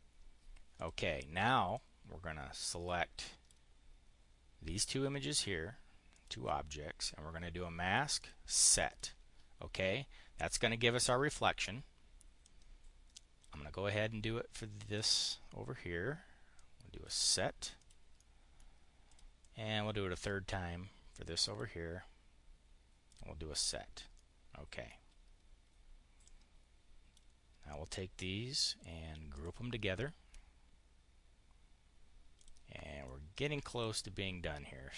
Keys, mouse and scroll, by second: 0.6 click, 1.6-3.4 drag, 5.9 click, 8.0 click, 8.7 click, 12.2-13.3 drag, 14.8 click, 16.4 click, 17.5 click, 17.9 click, 18.6 click, 19.0-20.2 drag, 21.3 click, 22.9 click, 23.4 click, 23.9 right click, 26.0-27.1 drag, 29.1 click, 32.2 click, 32.9 click.